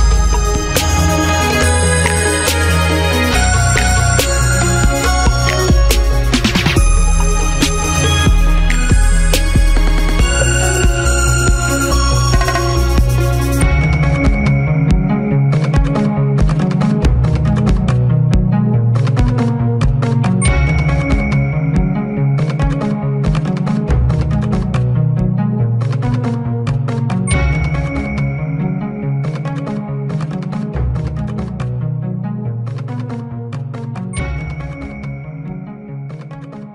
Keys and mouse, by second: 0.0 middle click, 0.3 ctrl+s, 0.7 middle click, 0.9 a, 3.8 z, 4.1 q, 5.6 s, 7.5-10.0 typing, 11.1 q, 13.0 z, 13.2 z, 13.6 middle click, 14.7 a, 15.1 middle click, 15.3 q, 15.8-18.9 middle drag, 18.9 g, 20.7 s, 23.6-26.8 typing, 24.0 click, 25.0 right click, 25.4 click, 28.6 click, 29.0-32.3 typing, 31.7 Tab, 33.4 a, 33.6 a, 34.0 l, 34.6 Tab, 34.9 a, 35.3 click, 35.5 alt+s, 35.9 a, 36.0 click, 36.3 alt+s.